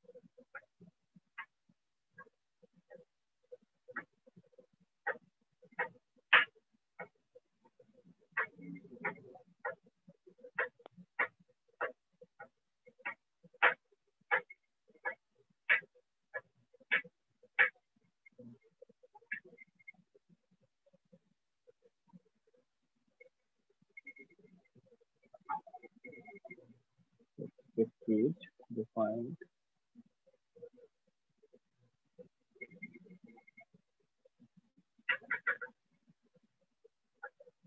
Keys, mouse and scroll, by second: 0.4 click, 1.4 click, 1.9 click, 4.1 shift+click, 5.5 click, 6.4 click, 7.0 click, 7.4 click, 7.8 click, 9.1 shift+click, 9.7 click, 9.8 click, 10.6-14.3 shift+click, 12.3 click, 12.6 click, 13.2 click, 13.7 click, 14.1 click, 14.2 click, 14.8 shift+click, 15.2 alt+click, 15.8 click, 16.4 click, 16.7 click, 18.2 click, 18.3 click, 19.2 alt+click, 21.0 click, 21.2 alt+click, 24.0 shift+click, 24.6 alt+click, 25.2-26.6 typing, 28.6 click, 29.6 click, 29.8-30.5 typing, 31.8 shift+click, 32.2-33.5 typing, 34.7 click, 35.7 click, 36.0 click, 37.1 click.